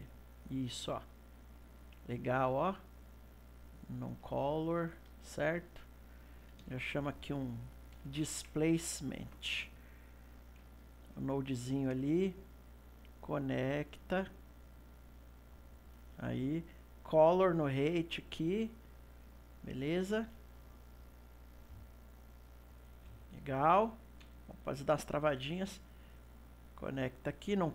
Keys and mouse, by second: 1.4 click, 1.7 middle click, 2.4 click, 3.4-4.6 drag, 4.6-5.7 ctrl+middle drag, 5.7 click, 10.8 middle click, 11.7 click, 12.8 click, 14.8 click, 16.8 click, 18.5-23.4 middle drag, 23.4 click, 24.1 click, 24.4-25.9 middle drag, 25.9 click.